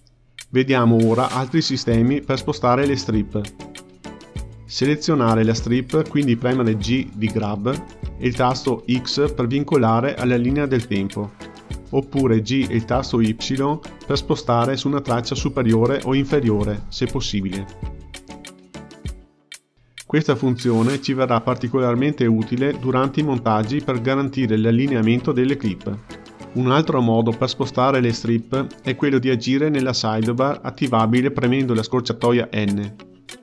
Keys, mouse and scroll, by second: 3.5 shift+a, 5.7-7.4 drag, 8.5 g, 13.1 g, 20.0 click, 20.4 g, 21.6 click, 21.9 g, 22.5 click, 22.7 g, 23.8 click, 24.7 g, 26.2 click, 31.1 n, 31.9 n, 32.4 n.